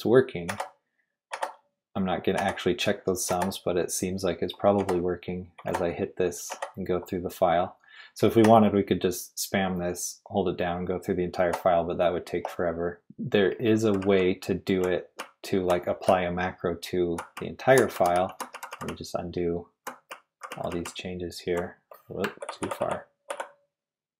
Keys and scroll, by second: 0.5 shift+q, 5.2 typing, 13.5-14.4 typing, 22.6 ctrl+r, 22.8 ctrl+r, 23.3 ctrl+r.